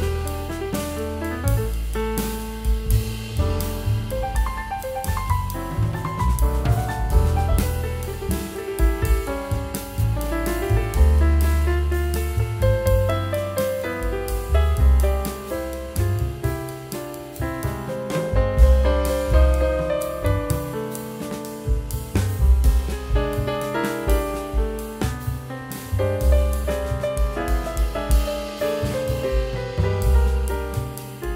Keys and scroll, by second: 3.9 [, 8.7 ], 18.0 [, 23.5 [.